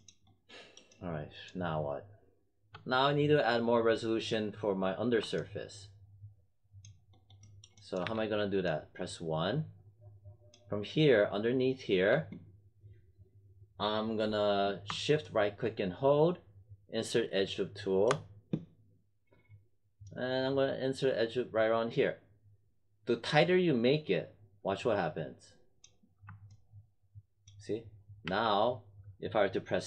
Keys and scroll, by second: 8.0 1, 28.2 w.